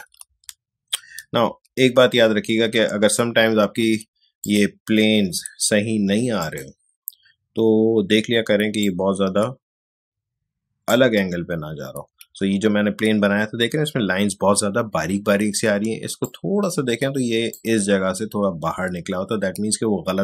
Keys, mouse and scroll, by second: 0.3 ctrl+z, 4.4 click, 8.8-12.3 drag, 12.3 ctrl+z, 16.2-20.1 drag.